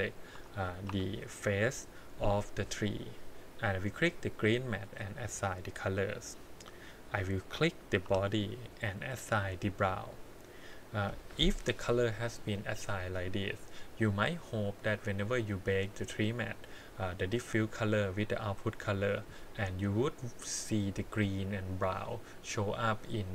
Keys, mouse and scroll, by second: 0.3 l, 0.9 l, 4.1 click, 5.1 click, 6.8 click, 8.0 l, 9.2 click, 14.2 click, 15.2 click, 16.1 click, 16.8 click, 17.3 click, 22.7-23.3 drag.